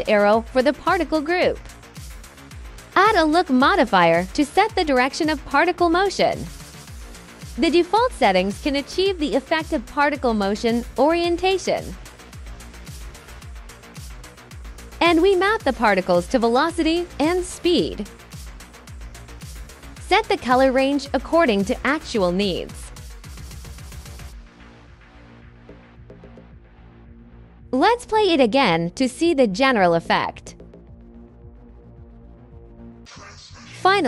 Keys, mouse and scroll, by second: 2.5 click, 3.7-4.8 drag, 7.7 click, 11.8 alt+right click, 13.2 alt+right drag, 13.6 alt+drag, 15.6 alt+click, 16.0 click, 16.9 click, 17.7 click, 19.5 click, 20.0 click, 20.2 click, 20.3 click, 20.6 click, 21.0 click, 22.0 click, 22.6 click, 22.8 click, 23.5 drag, 23.7 click, 24.2 click, 24.5 click, 25.0-25.6 drag, 25.9 drag, 26.2 click, 26.6 click, 27.3 click, 27.7 click, 28.6 click, 28.9 click, 30.7 right click, 31.0-31.8 alt+drag, 32.0 alt+right drag, 33.1 alt+click, 33.3 alt+click.